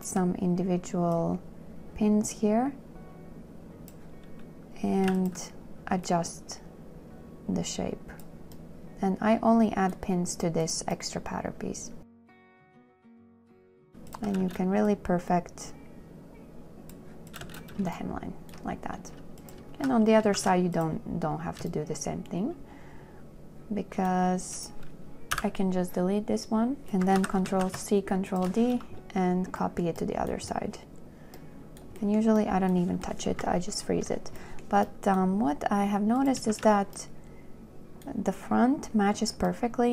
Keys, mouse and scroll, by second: 0.0 w, 0.2 click, 5.3 w, 5.4 click, 12.6 click, 14.1 w, 14.4 click, 17.7 space, 18.2 shift+right click, 20.0 shift+q, 20.6 shift+q, 22.0 shift+click, 25.6 Delete, 27.4 ctrl+click, 27.5 ctrl+c, 27.8 d, 31.6 shift+click, 36.8 shift+q.